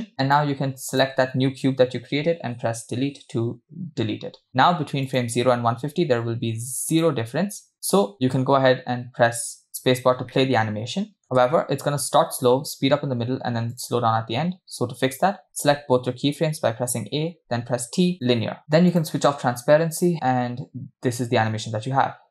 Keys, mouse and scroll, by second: 0.3 click, 1.0 click, 2.9 Delete, 3.8-4.3 scroll down 3, 5.3 click, 7.1 click, 7.7-8.5 scroll down 5, 8.1-8.5 scroll up 2, 8.5 space, 10.1 scroll down 1, 10.8-11.5 shift+middle drag, 11.9 space, 13.7 click, 15.7 a, 17.8 t, 19.0-20.2 drag, 20.2 space.